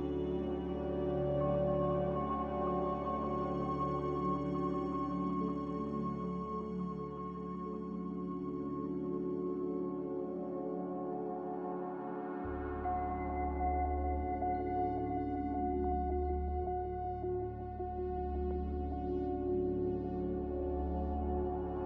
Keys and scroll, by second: 3.7 z, 5.7-6.5 typing, 11.7-13.4 typing.